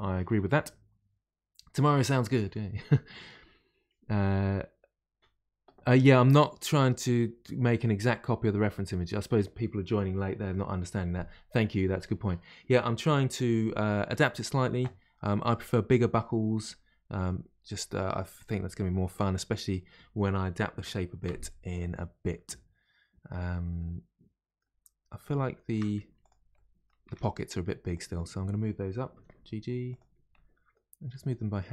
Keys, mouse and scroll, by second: 15.1-16.9 middle drag, 16.9-17.8 scroll down 1, 17.8-20.8 middle drag, 21.9-24.8 middle drag, 24.8-25.3 scroll up 4, 25.3 shift+middle click, 26.2 click, 26.5 middle click, 27.0 Tab, 27.9 click, 29.1 g, 30.3 middle click, 31.1 g.